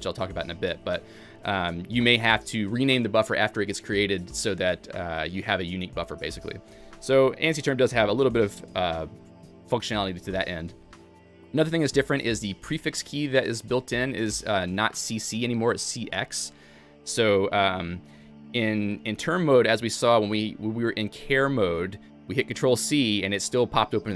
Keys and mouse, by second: 0.4-2.5 typing, 3.8-4.6 typing, 6.7 Escape, 7.0-7.8 typing, 10.0-10.7 typing, 12.6-13.3 typing, 15.8-17.8 typing, 18.4 Escape.